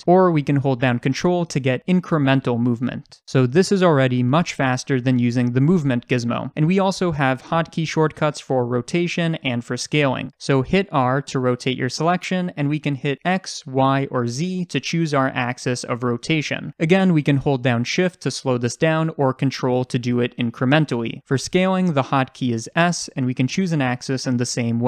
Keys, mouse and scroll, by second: 2.1 ctrl+click, 2.2 ctrl+z, 11.0 r, 20.5 ctrl+click, 20.6 ctrl+z, 22.7 s.